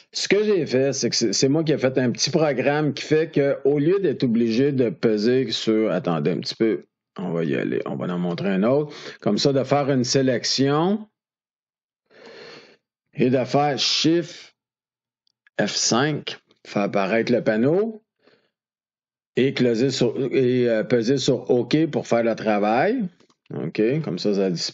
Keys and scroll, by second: 15.8 shift+F5.